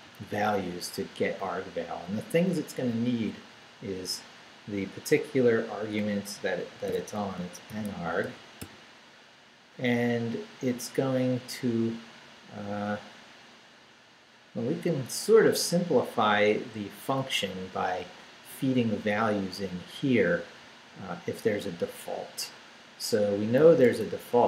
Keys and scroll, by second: 6.7-9.1 typing, 23.6-24.4 typing.